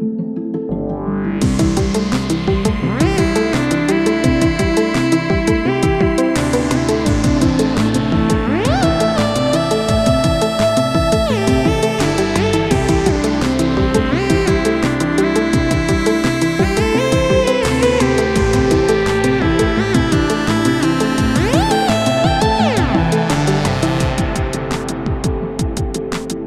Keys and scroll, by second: 1.6 shift+Home, 1.9 9, 9.1 ctrl+g.